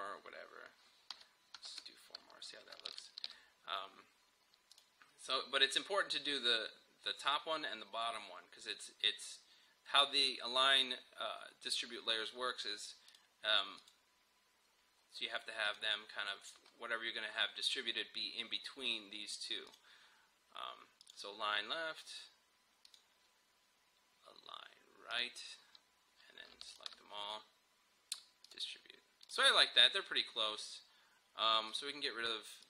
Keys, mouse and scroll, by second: 2.9 shift+click, 13.1 click, 14.8 scroll down 1, 15.7 click, 16.6 scroll up 1, 19.7 click, 31.7-32.6 drag.